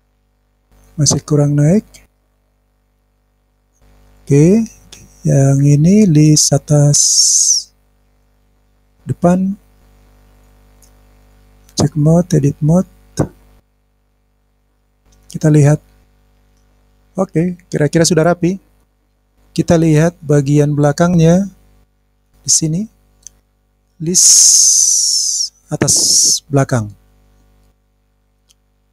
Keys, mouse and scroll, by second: 0.4 middle click, 2.1 click, 2.5 middle click, 3.1 click, 3.2 click, 14.0 click, 14.4 click, 15.0-18.9 middle drag, 18.9 scroll down 2, 19.0 scroll up 2, 19.0-19.4 scroll down 4, 19.4 click, 20.0 scroll down 1, 20.2-21.9 middle drag, 27.7 click, 28.4 click.